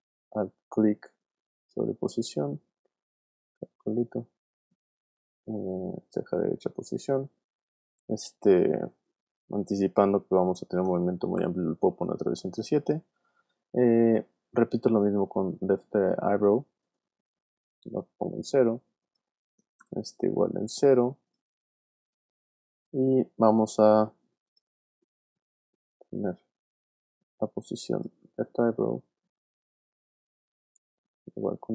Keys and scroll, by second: 10.5 shift+7, 11.9 7, 19.8 p, 25.4 p.